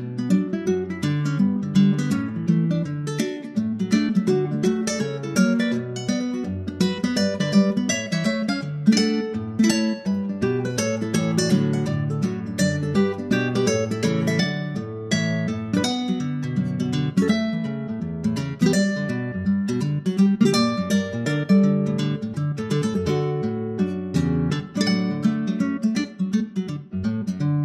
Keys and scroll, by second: 0.0 super+Tab, 0.5 super+s, 10.9 super+c, 12.1 super+v, 18.2 super+c, 19.3 shift+super+Right, 19.7 super+v, 19.9 super+s, 20.2 super+Tab, 25.5 super+Tab.